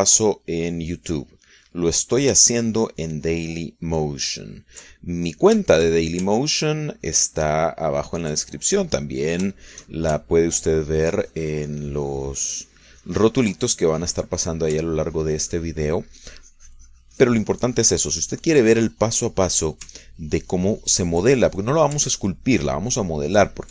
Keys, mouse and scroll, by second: 1.9 middle click, 2.3 middle click, 3.1 middle click, 3.6-6.1 ctrl+drag, 6.2 ctrl+middle click, 6.9 ctrl+shift+middle click, 7.6-9.5 ctrl+drag, 9.7 ctrl+middle click, 10.3 ctrl+click, 10.3 ctrl+right click, 11.0 shift+middle click, 11.7-14.8 ctrl+drag, 14.9 ctrl+middle click, 15.4-16.0 ctrl+scroll up 1, 16.0-20.3 ctrl+drag, 20.3 middle click, 21.1 ctrl+scroll up 1, 21.3-23.0 ctrl+drag, 23.0-23.5 ctrl+scroll up 1, 23.5-23.7 ctrl+drag.